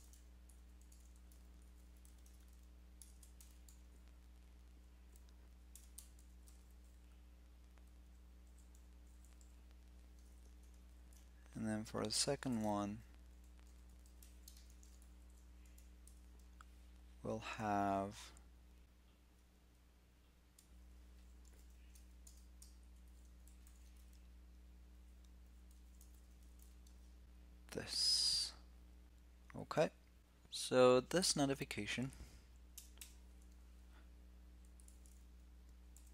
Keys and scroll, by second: 10.6 alt+shift+Down, 12.2 shift+super+k, 13.8 alt+shift+Left.